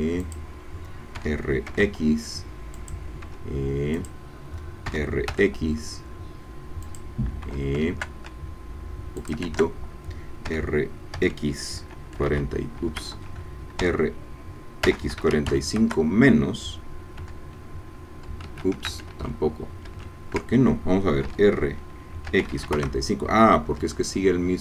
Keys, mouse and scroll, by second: 0.2 click, 1.1 r, 1.7 x, 2.7 click, 3.4 e, 4.0 click, 4.9 r, 5.3 x, 6.8 click, 7.6 e, 7.9 shift+Caps_Lock, 9.2 shift+click, 9.5 shift+Caps_Lock, 10.5 r, 11.2 x, 12.2 KP_4, 12.3 KP_5, 13.0 Escape, 13.8 r, 14.8 x, 15.1 KP_4, 15.2 KP_5, 15.5 KP_Subtract, 15.8 KP_Enter, 17.4 e, 18.4 Escape, 19.3 ctrl+z, 21.3 r, 22.3 x, 22.4 KP_4, 22.5 KP_5, 22.7 KP_Enter, 23.8 e.